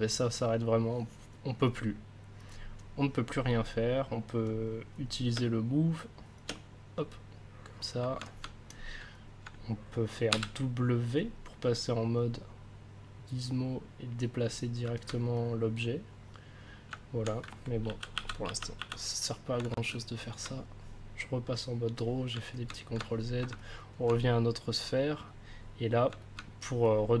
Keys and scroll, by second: 5.3 space, 10.3 w, 17.8 ctrl+z.